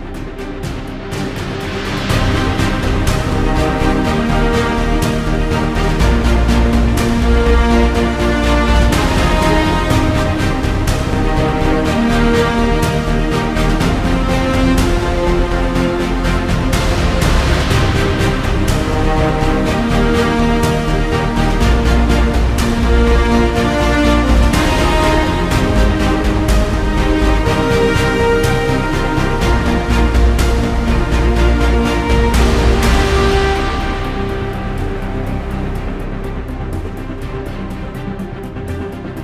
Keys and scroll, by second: 3.6 super+=, 3.8 space, 13.9 `, 14.2 super+=, 14.4 space, 22.4 super+-, 22.9 super+=, 23.2 space, 28.4 super+=, 28.6 space, 30.6 `.